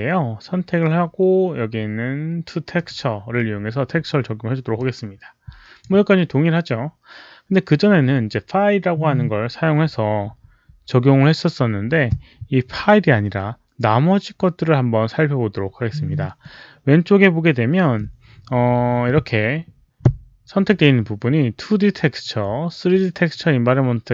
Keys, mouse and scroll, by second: 2.6 click, 4.7-5.7 drag, 10.3 click, 12.3 click.